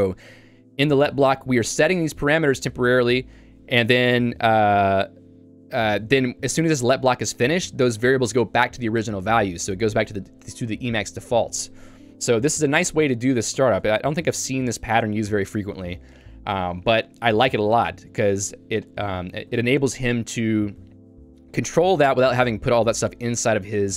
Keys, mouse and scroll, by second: 2.7 Escape, 3.2 j, 5.7 k, 12.6 Escape, 13.6 ctrl+u, 15.2 j.